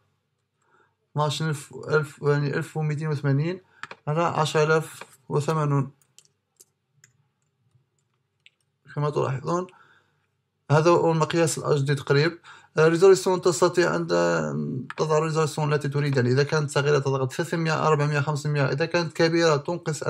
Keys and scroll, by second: 0.1 shift+à, 5.7 shift+&, 7.1 shift+à, 7.7 shift+!, 8.1 shift+à.